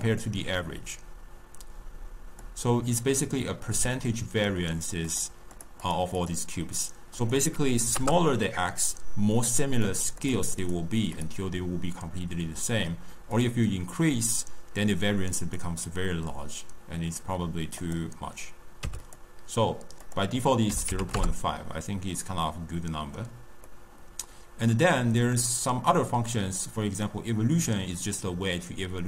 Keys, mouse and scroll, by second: 2.3-5.1 drag, 5.5 click, 5.8 click, 6.1 click, 7.1-9.8 drag, 10.1 click, 10.6 click, 11.1 click, 13.3-16.3 drag, 17.8-19.1 drag, 20.0-22.1 drag, 22.1-26.5 middle drag, 26.5-29.0 drag.